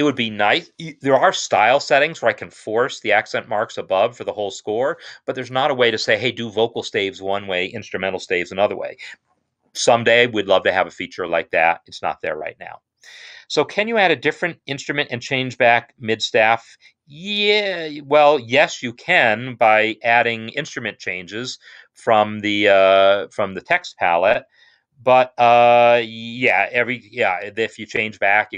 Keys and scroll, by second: 0.2 Escape.